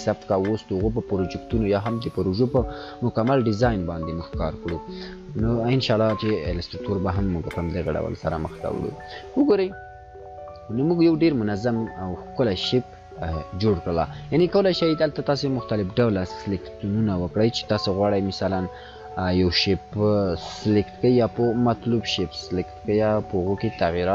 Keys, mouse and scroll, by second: 8.3 click, 8.5-9.3 drag.